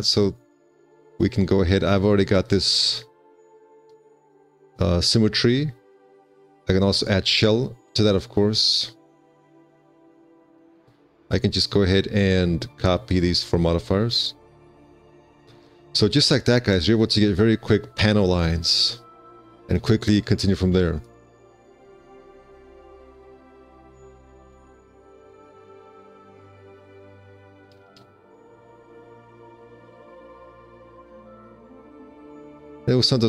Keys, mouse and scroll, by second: 11.0 middle click, 15.8 z, 21.5 middle click, 21.8 4, 23.4 alt+z, 25.1 ctrl+space, 26.8 z, 28.5 shift+space, 32.1 1.